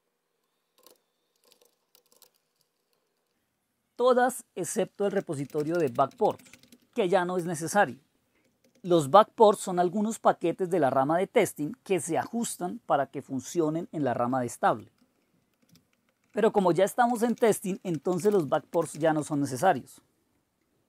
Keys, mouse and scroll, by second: 0.8-2.1 typing, 4.8-7.1 typing, 7.4 Return, 8.6 Down, 8.7 Down, 8.8 Down, 8.9 Down, 9.4 Delete, 9.7 Delete, 14.2 ctrl+o, 14.7 Return, 15.6 ctrl+x, 16.2 Return, 16.3 Return, 16.8-19.9 typing.